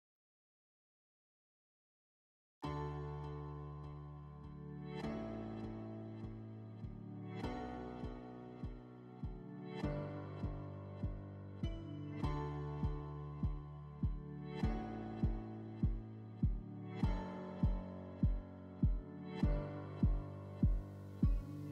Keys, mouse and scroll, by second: 7.2-8.1 drag, 8.6 click, 9.6 click, 10.1 click, 10.6 click, 10.9 click, 11.2 f, 12.8-13.4 shift+drag, 13.9 shift+click, 14.1 shift+click, 15.9 shift+click, 16.7 shift+click, 17.1 click, 18.1 click, 18.6 click, 19.5 click, 20.4 middle click, 21.0 alt+w, 21.3 alt+w.